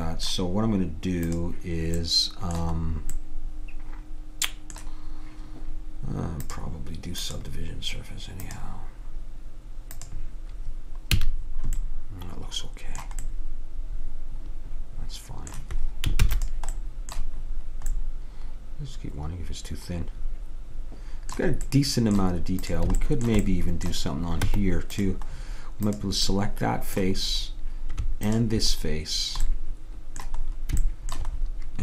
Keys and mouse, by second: 1.4-3.1 drag, 6.5-11.9 drag, 11.2 a, 16.3 ctrl+s, 22.7 click, 23.6 middle click, 23.8 click, 23.9 right click, 24.0 click, 24.5 Tab, 26.0-27.9 drag, 28.3-30.2 drag.